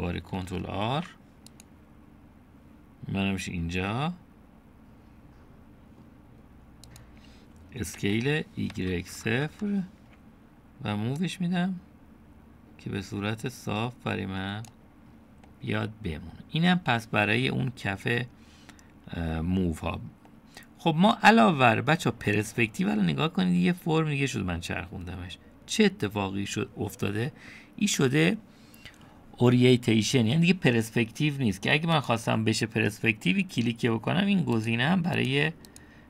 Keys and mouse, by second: 1.8 ctrl+r, 9.0 s, 12.3-15.9 drag, 13.6 typing, 16.5-19.2 middle drag, 21.3 middle click, 23.6-27.5 middle drag, 33.0 click, 35.6 click.